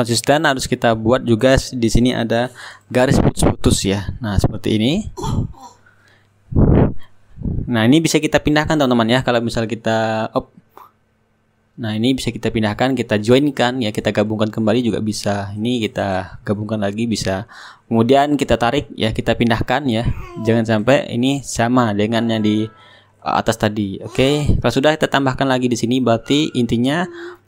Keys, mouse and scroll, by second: 0.9-4.4 drag, 4.5 ctrl+z, 4.9 shift+click, 4.9 shift+right click, 6.2 shift+right click, 6.5-7.5 middle drag, 7.5 click, 7.5-8.6 right drag, 9.0 middle click, 9.8-13.9 drag, 10.7 ctrl+z, 14.1-16.8 drag, 17.7-27.4 drag, 18.8 shift+right click.